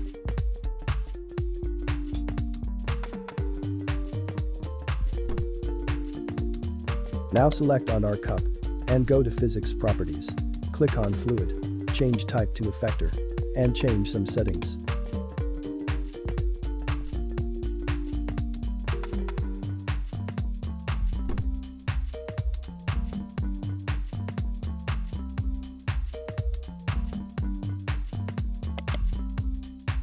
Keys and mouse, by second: 7.3 right click, 12.0-17.9 drag, 18.0-20.4 drag, 24.5-26.0 drag, 26.0 0, 28.8 right click.